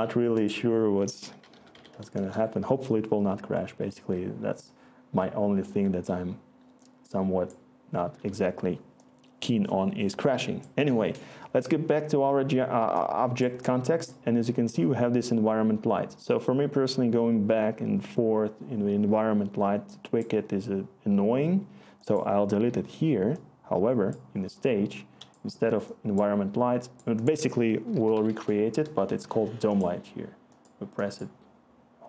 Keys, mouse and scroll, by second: 1.1-2.2 typing, 22.7 Delete, 27.5 Tab, 31.0 typing.